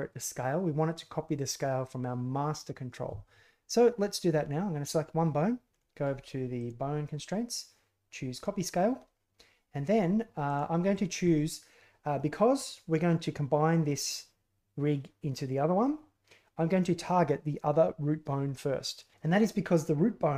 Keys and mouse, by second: 6.5-8.4 drag, 10.4-20.3 drag.